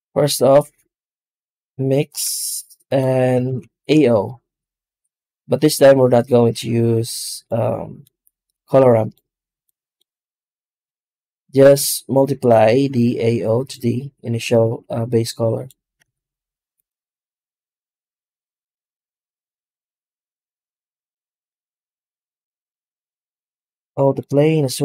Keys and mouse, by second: 3.3 shift+a, 7.9-9.0 drag, 9.5-10.8 drag, 12.0-13.6 drag, 14.2-15.6 drag, 15.9 z, 20.6-21.3 middle drag, 21.9 z, 23.9 click.